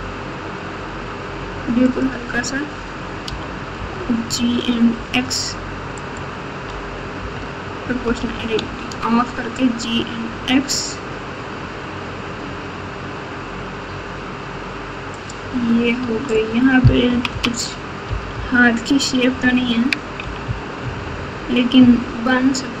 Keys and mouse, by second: 3.2 g, 7.1 o, 8.0 g, 16.0 Tab, 17.0 KP_6, 17.3 KP_6, 18.0 KP_4, 18.3 KP_4, 19.3 KP_Subtract, 20.2 KP_2, 20.4 KP_2, 20.8 KP_2, 21.8 KP_1.